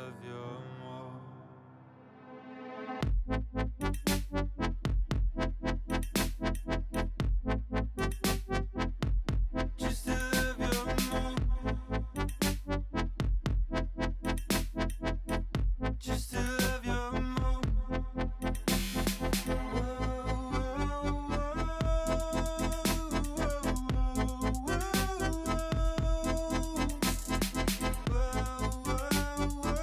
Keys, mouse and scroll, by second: 0.5-0.8 scroll down 3, 0.8-1.2 middle drag, 1.2 alt+z, 1.4-1.9 shift+middle drag, 1.9-2.3 scroll up 1, 2.3 ,, 3.2 ., 4.4 shift+middle click, 4.6 scroll up 2, 4.9 s, 6.5 alt+z, 6.7 middle click, 7.2 s, 11.4 click, 11.6-12.1 scroll down 3, 12.1-13.2 middle drag, 13.2 scroll up 3, 13.5-14.9 shift+middle drag, 14.9 ctrl+z, 15.2 ctrl+z, 15.7-16.7 middle drag, 16.7 KP_3, 17.3 alt+z, 17.6-18.1 drag, 18.1 x, 19.1 alt+z, 19.5-20.2 shift+middle drag, 20.2-20.7 scroll up 1, 20.7 l, 21.0 l, 21.1 middle click, 21.8 scroll up 1, 22.1 s, 23.8 alt+z, 24.1 middle click, 24.5 g, 25.0 s, 28.4 g, 29.3 alt+z, 29.7 middle click.